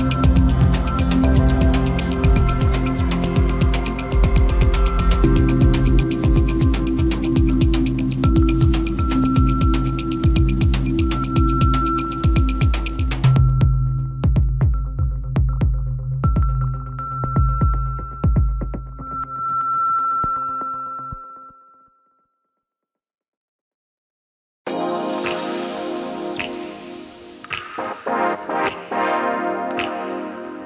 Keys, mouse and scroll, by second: 1.5-2.0 scroll up 1, 2.1 3, 2.7 click, 3.5 shift+click, 4.3 shift+g, 6.0-7.0 middle drag, 7.0 drag, 7.4 click, 8.2 click, 8.6 Tab, 9.3 KP_0, 10.2-10.6 scroll up 5, 12.0-12.5 scroll down 2, 14.4-16.6 scroll down 1, 16.6 click, 18.0 click, 19.2 click, 20.3 click, 22.5 click, 23.7 click, 25.2-29.6 drag.